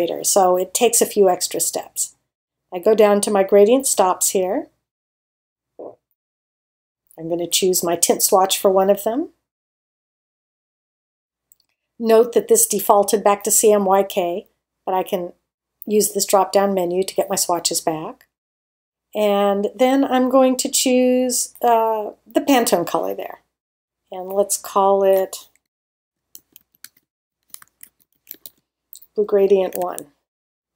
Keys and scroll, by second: 25.5-29.7 typing.